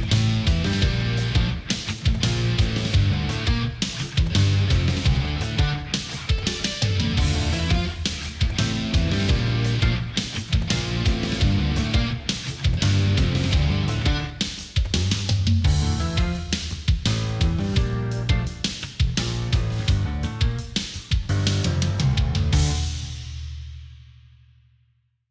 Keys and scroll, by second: 0.6 ctrl+-, 1.1 space, 3.9 ctrl+=, 4.1 space, 6.9 ctrl+z, 8.6 ctrl+0, 9.8 ctrl+c, 12.4-13.7 typing, 15.8 Down, 16.1 Up.